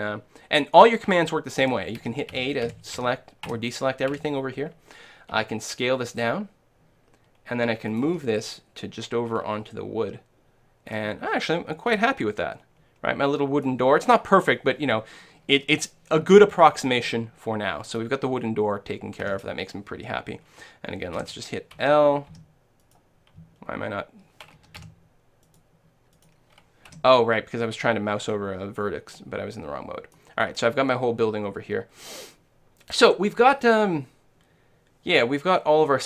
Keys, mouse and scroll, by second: 1.6-4.1 typing, 5.4 s, 8.1 g, 11.0-12.8 drag, 11.9-13.8 middle drag, 17.0-18.8 middle drag, 19.3 a, 21.5 l, 21.9 l, 22.4 l, 22.9-24.6 right drag, 23.8-25.5 middle drag, 24.7 a, 25.5-27.9 right drag, 25.5 a, 27.0 l, 28.2-30.9 middle drag.